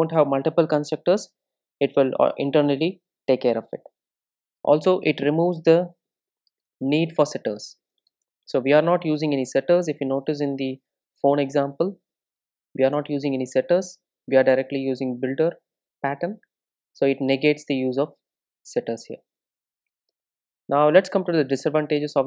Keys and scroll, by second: 10.6 super+e, 16.7 super+e.